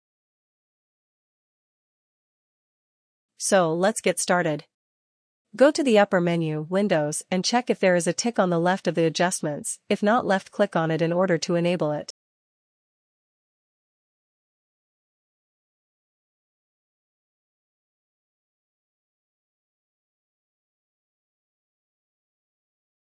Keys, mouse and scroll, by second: 0.8 click, 3.3 click, 8.2 click, 14.4 click, 19.8-23.1 drag.